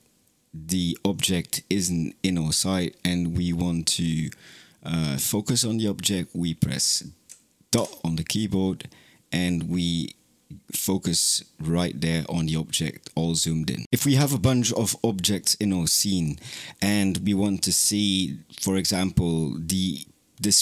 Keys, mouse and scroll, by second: 7.6 KP_Decimal.